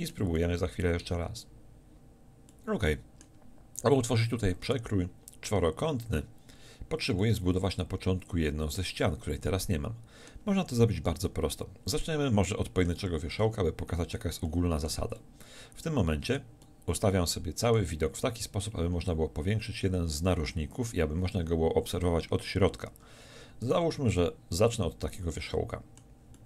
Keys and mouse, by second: 2.0 a, 11.2 middle click, 18.6-23.6 middle drag, 23.6-25.5 right drag, 25.5-26.4 middle drag.